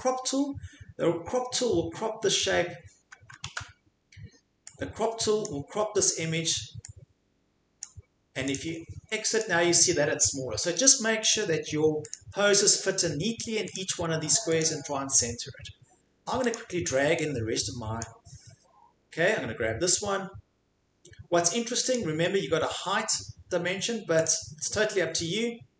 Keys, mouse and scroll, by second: 2.4 click, 3.5 ctrl+z, 5.4 click, 7.8 click, 8.5 click, 9.4 click, 11.3 click, 12.1 click, 13.7 scroll, 14.6 scroll, 16.5 click, 18.0 click, 20.7 scroll down 1, 21.9 click, 24.3 click.